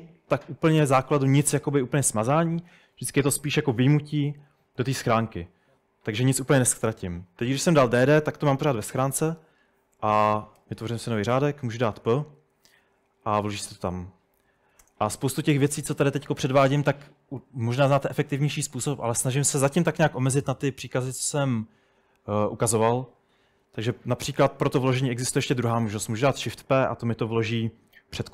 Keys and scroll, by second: 10.0-10.6 typing, 11.3 Escape, 11.8-12.5 typing, 14.0-15.1 typing, 23.8-26.1 typing.